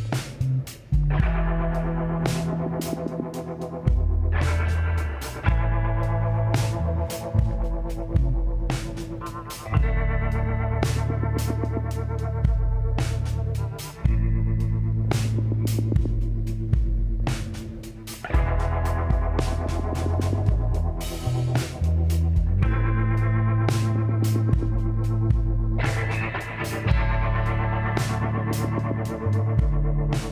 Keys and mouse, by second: 1.6-3.5 middle drag, 3.5 z, 4.8-6.5 middle drag, 6.5-8.4 drag, 11.0-13.1 middle drag, 13.1 z, 13.5 middle click, 14.1 middle click, 14.2-15.6 drag, 16.9 middle click, 17.7 middle click, 19.1-22.2 middle drag, 22.2-24.2 drag, 22.8-24.6 middle drag, 24.7 middle click, 26.0-28.1 middle drag, 28.2 a, 28.4-30.3 drag.